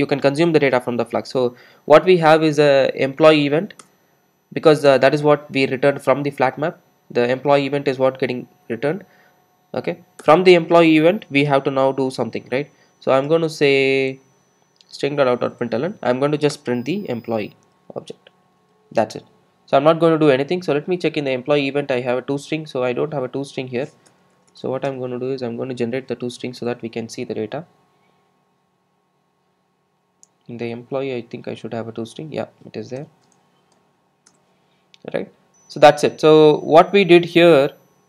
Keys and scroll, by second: 3.9 Return, 4.9 shift+Return, 14.1 Tab, 20.2 Return, 20.6 super+s, 25.2 super+n, 25.5 super+n, 33.1 super+e.